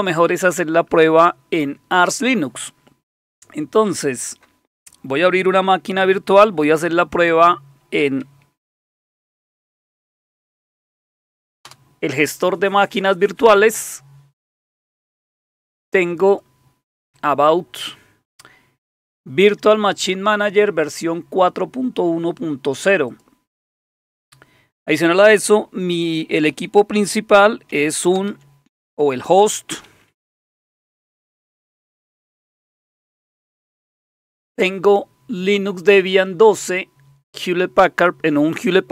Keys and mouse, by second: 4.1 click, 6.0 super+9, 8.8 alt+super+d, 10.6 Down, 10.8 Down, 10.9 Down, 11.7 Return, 16.3 click, 17.2 click, 23.1 click, 24.2-27.1 drag, 27.1 super+0, 28.2 super+Return, 29.6-32.9 typing.